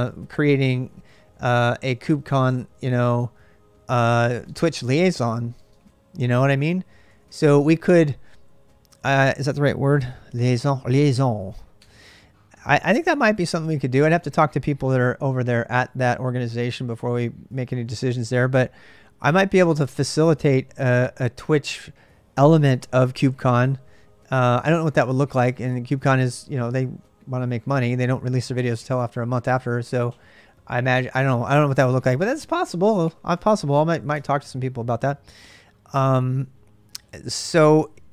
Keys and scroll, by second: 0.0-9.7 typing, 11.0 1, 11.6 Return, 31.2 ctrl+[, 31.4 j, 31.8 k, 32.8 j, 33.1 j, 33.9 o, 37.6 ctrl+[, 37.7 k, 37.9 k.